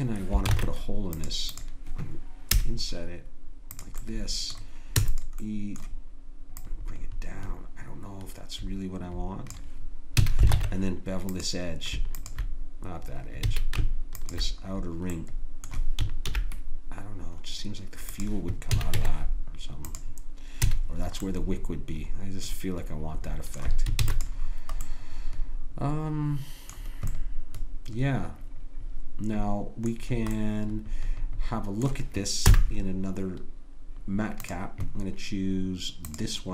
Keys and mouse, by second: 0.5 ctrl+Tab, 2.5 i, 5.0 e, 10.2 a, 10.5 ctrl+Tab, 12.2-13.6 drag, 13.5 a, 14.7 click, 16.3 ctrl+b, 18.7 a, 18.9 Tab, 20.7 a, 24.0 ctrl+s, 32.4 n.